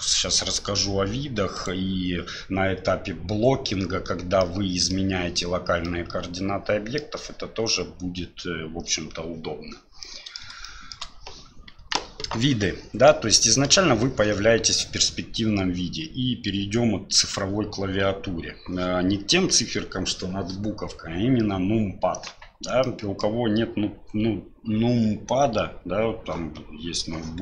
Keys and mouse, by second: 0.5 right click, 1.5 right click, 4.4 middle click, 5.8-7.0 middle drag, 10.0 middle click, 10.6 shift+middle click, 11.8 KP_1, 13.1 middle click, 22.9 middle click.